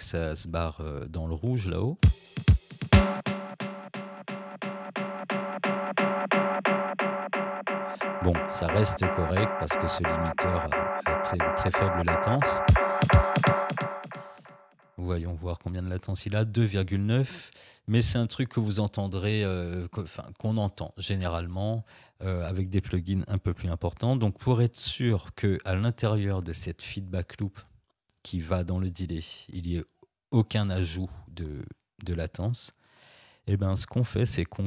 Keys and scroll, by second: 2.0 space, 12.6 space.